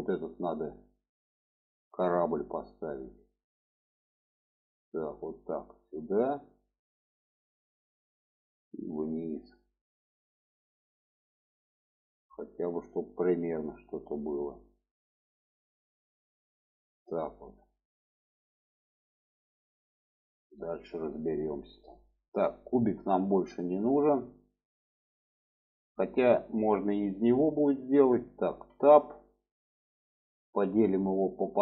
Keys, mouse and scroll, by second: 4.3-7.8 drag, 9.6-19.1 drag, 20.3-21.8 middle drag, 22.3 click, 25.9-26.7 middle drag, 28.7 Tab, 31.2 click.